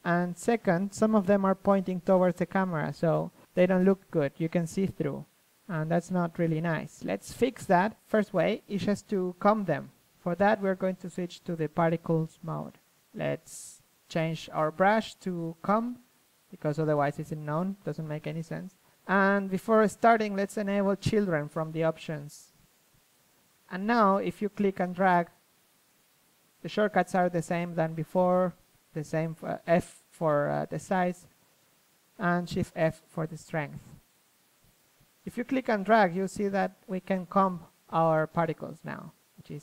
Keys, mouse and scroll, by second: 0.2 middle click, 0.4 z, 2.2 z, 12.0-14.2 drag, 16.5-18.2 drag, 19.5-20.9 drag, 20.9-23.5 middle drag, 22.5 d, 23.5 f, 24.4 middle click, 24.6 shift+f, 26.4 click, 26.6 f, 27.2-28.3 drag, 29.6 click, 30.1-36.7 drag, 36.7 KP_1, 38.5-39.6 drag.